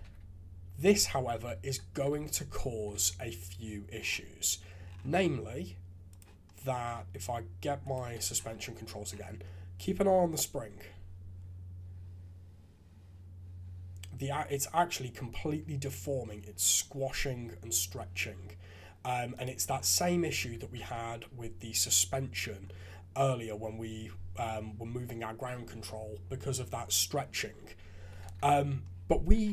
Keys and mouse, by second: 0.0 alt+a, 0.7 click, 1.3 ctrl+Tab, 2.1 shift+z, 2.9 shift+z, 8.1 shift+z, 10.0 g, 20.4 shift+z, 20.8 shift+z, 23.1 click, 28.0 KP_3, 28.2 shift+z.